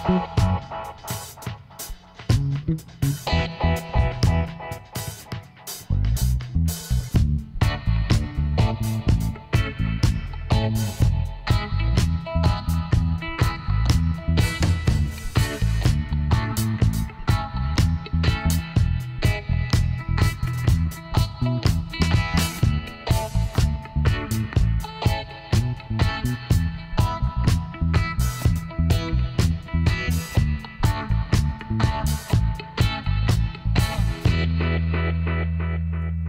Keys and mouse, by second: 0.3 click, 1.1 click, 1.2 right click, 2.2-3.8 drag, 4.0-8.1 middle drag, 9.5 Tab, 11.5-12.8 middle drag, 12.8 click, 12.8 right click, 13.0 middle click, 13.5 i, 14.5 click, 14.9 i, 17.9 Tab, 21.1 middle click, 22.5 a, 23.8-28.0 middle drag, 28.6 click, 29.2 Tab, 29.9 middle click, 30.2 click, 31.6 Tab, 34.1 ctrl+j, 35.1 Tab.